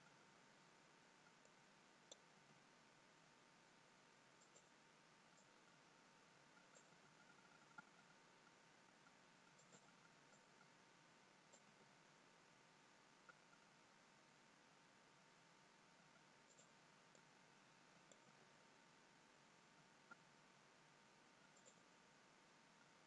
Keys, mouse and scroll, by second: 2.1 click, 2.4 g, 5.4 click, 7.0 g, 10.4 click, 11.6 g, 17.1 click, 19.7 g.